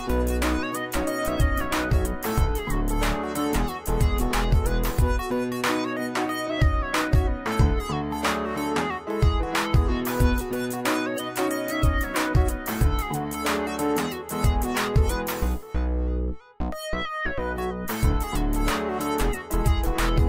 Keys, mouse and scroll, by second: 2.9 alt+Num_Lock, 3.1 click, 3.2-5.4 alt+drag, 7.0 z, 7.3-8.2 alt+click, 8.0 space, 8.8 click, 11.5-13.7 alt+shift+click, 16.5-17.7 alt+click, 18.7 ctrl+d.